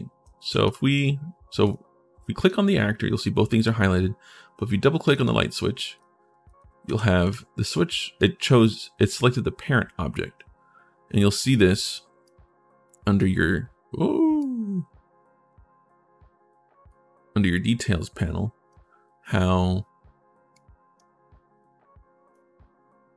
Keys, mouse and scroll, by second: 0.0 a, 0.4 d, 1.4 right click, 5.6-8.0 right drag, 5.7-7.5 typing, 12.0 click, 14.2-16.6 drag, 17.5 click.